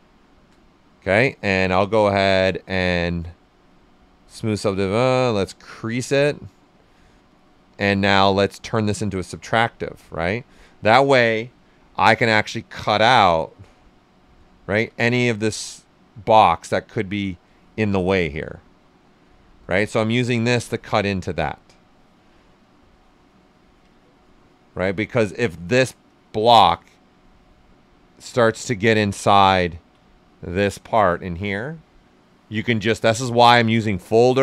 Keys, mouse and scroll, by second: 2.1-8.8 drag, 5.4 typing, 9.6-10.2 typing, 12.2-14.6 drag, 14.6 shift+f, 15.4-17.6 drag, 17.6 shift+f, 18.1 q, 18.3-22.1 right drag, 22.1-23.9 right drag, 23.9-27.1 ctrl+right drag, 27.1 alt+right click, 28.4-32.4 ctrl+right drag, 33.3-34.4 drag.